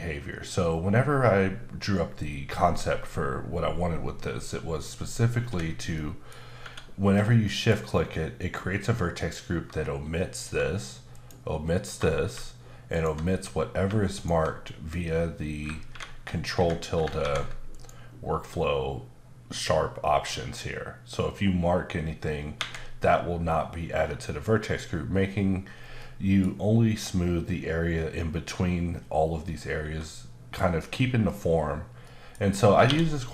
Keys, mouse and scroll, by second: 5.9 middle click, 6.4 scroll up 2, 6.6 Tab, 7.1-7.4 scroll up 1, 7.4 middle click, 9.1 alt+click, 11.1 alt+double click, 12.9 click, 14.1 click, 15.9 ctrl+Escape, 17.7 click, 22.6 Escape, 26.0 middle click, 29.8 Tab, 31.6-32.0 scroll down 1, 32.0 middle click, 32.9 q.